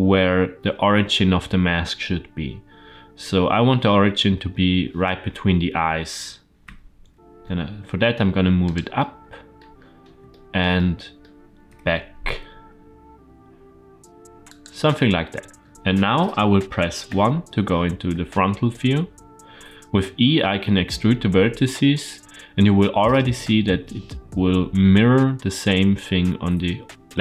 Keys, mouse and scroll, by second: 6.5 g, 8.8 middle click, 9.6-10.2 scroll up 3, 10.2 shift+middle click, 10.6 middle click, 11.5 g, 14.8 middle click, 16.9 KP_1, 18.6-19.2 shift+middle drag.